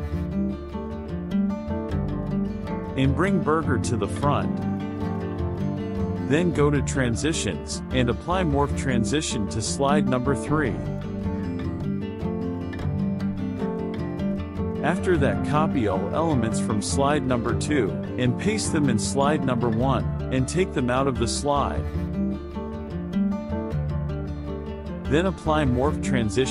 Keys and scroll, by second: 5.0 KP_Subtract, 12.4 KP_Subtract, 17.8 ctrl+c, 20.9 ctrl+v.